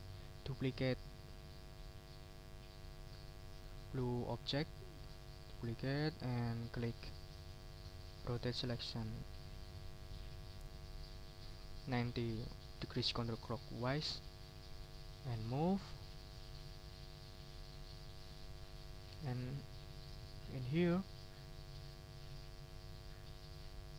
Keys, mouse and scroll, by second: 1.1 click, 9.0 click, 14.2 middle click, 14.7-16.0 drag, 16.3 middle click, 17.3 click, 17.9 click, 18.7 middle click, 19.1 right click, 19.5 ctrl+scroll up 2, 20.1 ctrl+right click, 20.6 ctrl+scroll down 2, 21.3 ctrl+click, 22.2 click, 23.1 click, 23.5 ctrl+click.